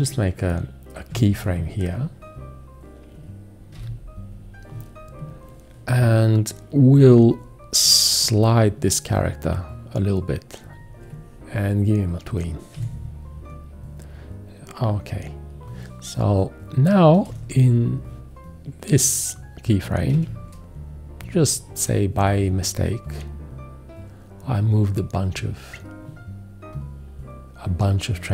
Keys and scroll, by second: 1.1 z, 3.8 x, 12.7 4, 17.3 v, 20.1 q.